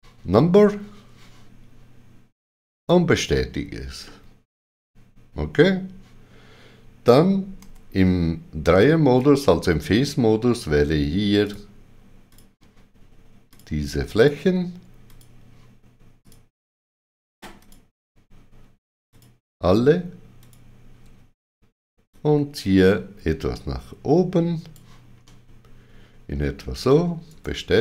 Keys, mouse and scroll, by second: 2.7 right click, 4.0 middle click, 7.6 3, 9.1 click, 11.4 shift+click, 12.3 shift+click, 13.5 shift+click, 22.1 shift+click, 25.2 middle click, 27.3 right click.